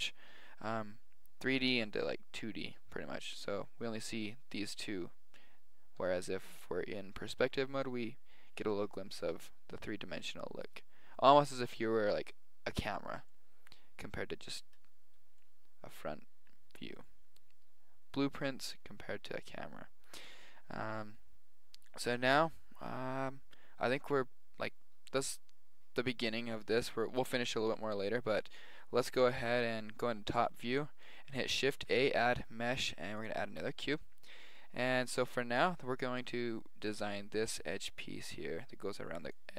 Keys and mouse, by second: 6.0 KP_5, 8.6 KP_5, 10.5-11.5 middle drag, 17.5-18.9 middle drag, 29.4 KP_7, 30.2-32.6 middle drag, 31.7 shift+a.